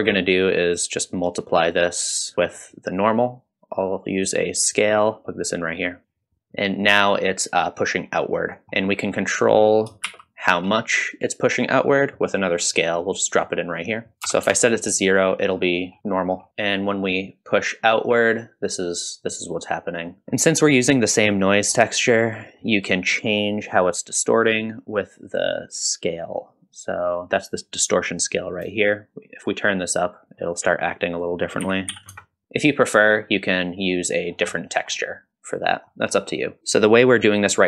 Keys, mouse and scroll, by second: 1.4 click, 2.3 click, 2.3 middle click, 2.9-5.1 drag, 5.2 click, 6.0-6.5 drag, 8.6 click, 8.6 middle click, 9.4 click, 10.2 shift+d, 13.3-13.8 drag, 14.1-15.3 drag, 15.7 middle drag, 16.0 scroll down 1, 16.1 middle click, 16.9-20.2 shift+drag, 16.9 scroll up 1, 20.2 scroll up 2, 20.4 middle click, 21.6 middle click, 22.5 middle drag, 23.1 middle click, 29.0-30.2 shift+drag, 31.1-33.1 drag, 33.7 middle click, 34.3 scroll down 1, 34.5 middle click, 35.0 middle click, 35.7 middle click, 36.2-36.6 scroll up 1, 36.6 middle click, 36.6-37.0 scroll down 1.